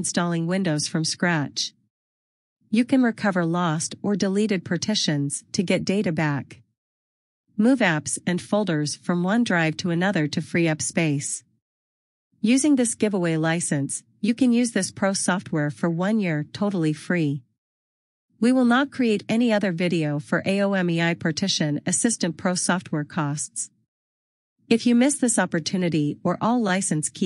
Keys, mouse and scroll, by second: 0.5 double click, 4.7 click, 4.9 double click, 5.1 click, 25.1 click, 26.5 click.